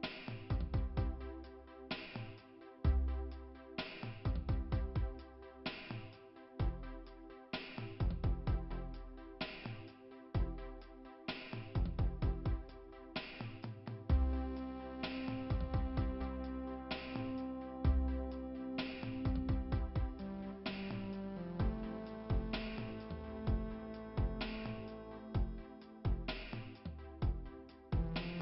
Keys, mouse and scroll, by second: 1.6 click, 5.1 click, 6.8 click, 7.6 right click, 7.9 right click, 8.5 click, 16.9 click, 18.0-18.4 scroll down 1, 19.3 middle click, 20.3 click, 21.9 click, 27.9 scroll down 1.